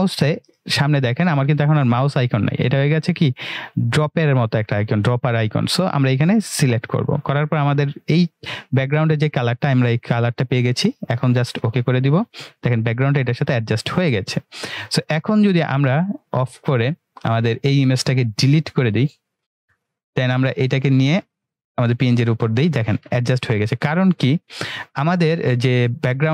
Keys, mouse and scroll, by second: 6.6 click, 11.6 click, 16.1 click, 18.9 Delete, 20.4-21.4 drag.